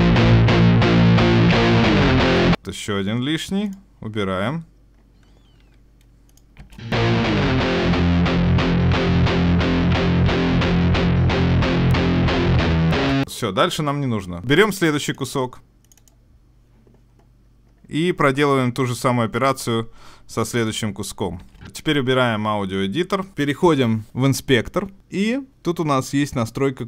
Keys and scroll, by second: 14.4 super+s.